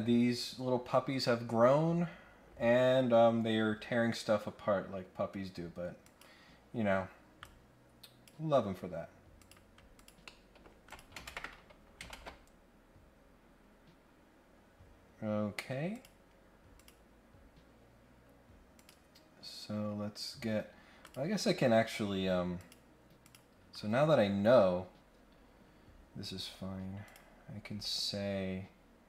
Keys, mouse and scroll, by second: 6.0 click, 7.4 click, 9.4 click, 9.9 click, 10.2 middle click, 10.8 click, 12.1 ctrl+Tab, 15.9 click, 16.7 click, 18.7 click, 21.0 click, 21.3 scroll down 1, 21.5 scroll up 1, 22.5 click, 23.2 click, 24.6 scroll down 1, 24.8-25.4 scroll up 4, 27.0 click.